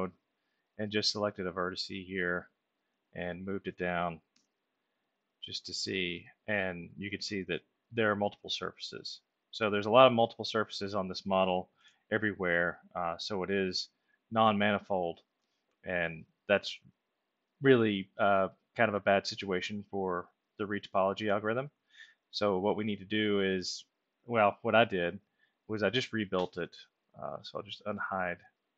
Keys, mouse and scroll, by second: 1.6 click, 2.4-3.8 alt+middle drag, 4.3 w, 5.7-6.8 drag, 7.7 alt+middle click, 9.9 alt+middle click, 11.7 ctrl+z, 13.7 middle click, 14.6 ctrl+alt+middle click, 19.6 middle click, 20.7-21.8 alt+middle drag, 25.6 alt+click, 27.8 alt+click, 28.6-28.7 ctrl+alt+middle drag.